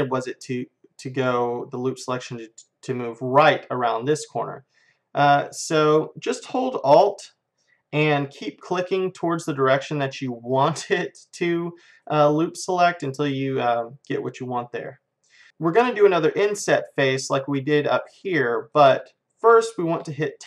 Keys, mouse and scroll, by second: 3.4-8.3 middle drag, 8.3-10.3 drag, 10.6-19.8 middle drag.